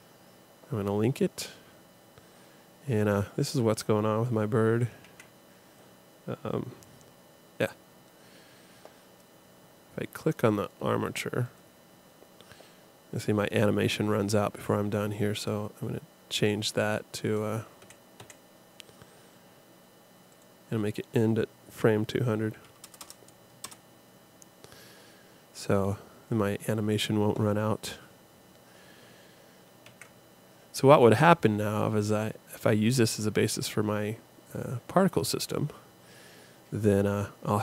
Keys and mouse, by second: 1.5 middle click, 1.6 click, 2.9-4.9 drag, 5.0 alt+a, 10.2 click, 15.4 space, 18.2 Escape, 20.3 click, 23.0 KP_0, 28.0-29.8 middle drag, 29.8 alt+a.